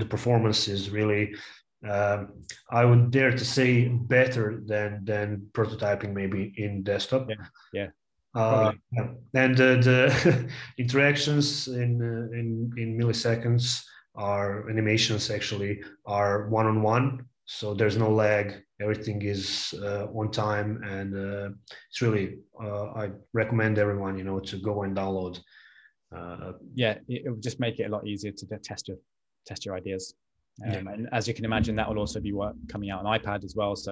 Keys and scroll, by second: 20.6 super+Tab, 22.1 a.